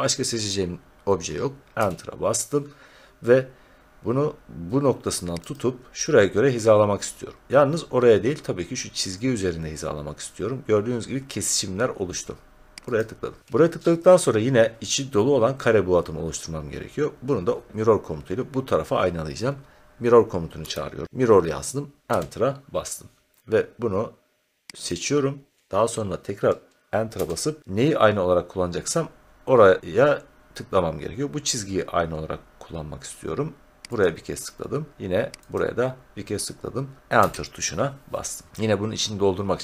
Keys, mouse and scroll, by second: 1.7 Return, 5.5-7.4 drag, 12.9-16.2 drag, 20.3-21.5 typing, 22.1 Return, 24.8-27.1 drag, 27.1 Return, 34.0 click, 35.5 click, 37.1 Return.